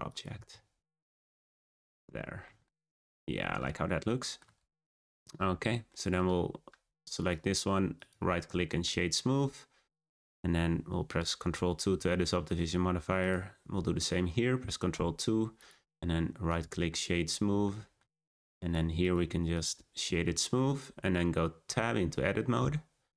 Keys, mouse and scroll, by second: 0.3 s, 1.8-2.4 scroll down 2, 2.4-2.8 middle drag, 2.8 click, 3.2-4.2 scroll up 3, 4.2-4.5 shift+middle drag, 4.5-4.9 scroll down 2, 4.9-5.4 shift+middle drag, 5.4 scroll down 1, 5.5 scroll up 3, 5.8 scroll down 1, 5.9-6.6 shift+middle drag, 6.6-6.9 scroll up 1, 6.9 click, 7.1 right click, 8.6-11.7 shift+middle drag, 11.8 ctrl+2, 12.2-13.2 scroll up 2, 13.2 click, 14.9 ctrl+2, 15.5-17.2 right drag, 17.2-17.6 scroll down 1, 17.6-18.5 shift+middle drag, 18.5 click, 18.9-20.2 right drag, 20.2-21.6 shift+middle drag, 21.6 Tab.